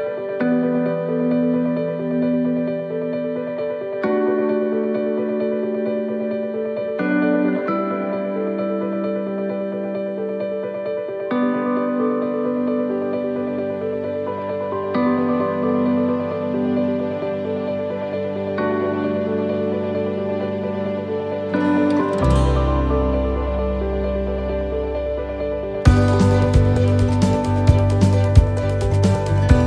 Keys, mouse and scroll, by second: 8.3 shift+right click, 10.4 shift+right click, 10.5 middle click, 11.0-11.3 scroll down 1, 12.2 e, 16.2 middle click, 16.7 middle click, 18.8 middle click, 18.8 scroll up 1, 19.1 middle click, 20.9 middle click, 22.8 shift+middle click, 23.1 shift+middle click, 23.6 middle click, 24.7 shift+middle click, 27.8 scroll up 1, 28.4 shift+middle click.